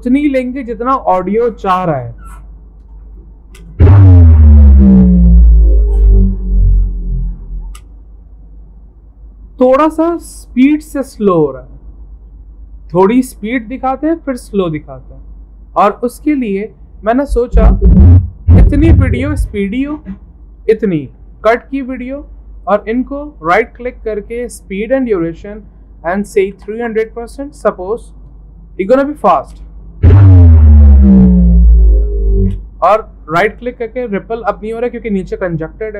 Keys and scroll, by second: 24.2-26.7 typing.